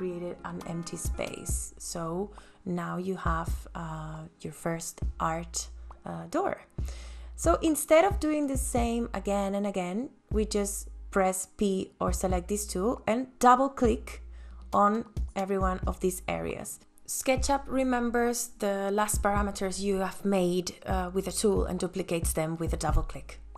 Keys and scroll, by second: 9.4 p, 18.4 space, 20.5 ctrl+s.